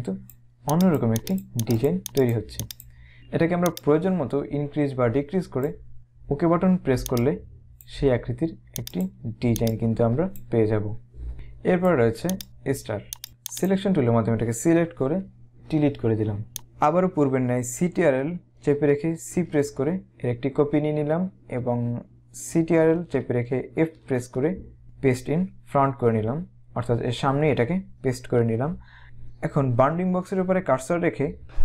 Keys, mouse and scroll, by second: 3.8 click, 7.2 click, 8.9 click, 11.3 click, 13.6 click, 15.6 Delete, 16.6 click, 19.2 ctrl+c.